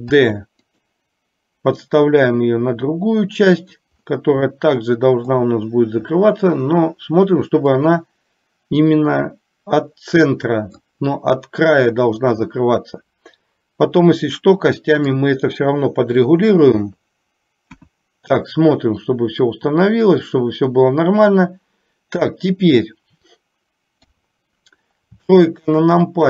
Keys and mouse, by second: 0.4 shift+d, 2.0-3.8 drag, 4.6 middle click, 7.8-10.9 drag, 12.5-15.4 middle drag, 16.9 KP_3, 17.9 KP_1, 24.0 KP_3, 25.5 shift+middle click.